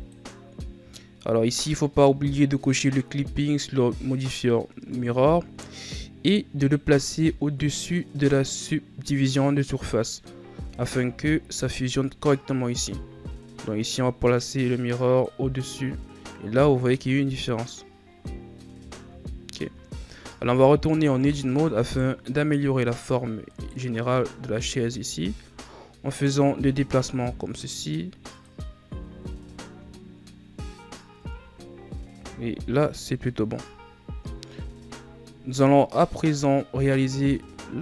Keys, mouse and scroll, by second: 6.5-9.5 drag, 10.5 Tab, 11.2-13.7 scroll up 10, 13.7-14.3 scroll up 1, 14.3 click, 18.0-19.0 scroll down 12, 19.0-19.7 scroll up 2, 19.7-20.3 scroll down 1, 20.3 Tab, 21.7 alt+right click, 22.8 alt+right click, 23.4 right click, 24.7 g, 28.8 Tab, 29.5 scroll down 1, 30.4-31.1 scroll up 5, 31.1 Tab, 32.1 Tab, 32.4-33.1 scroll down 2, 33.1 KP_3, 37.3 scroll up 2.